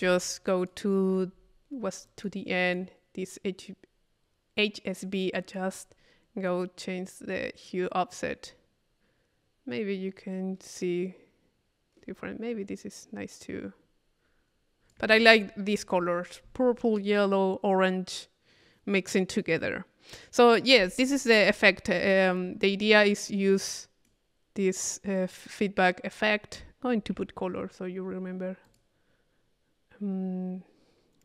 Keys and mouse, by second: 0.0 middle click, 0.5 click, 2.0 middle click, 2.1 click, 2.7 click, 5.3 click, 6.5-15.1 drag, 15.6 click, 15.8-17.0 middle drag, 22.0 click, 22.8 click, 22.8 middle click, 23.0 right click, 23.0 middle click, 23.2-24.7 right drag, 27.1 c, 28.7 click.